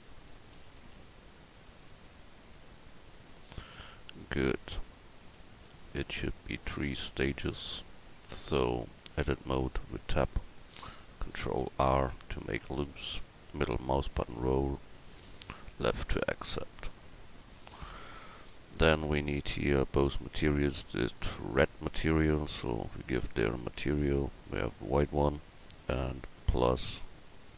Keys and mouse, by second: 0.6 s, 2.9-5.7 drag, 5.7 middle drag, 7.9-9.3 drag, 9.3 Tab, 11.5 ctrl+r.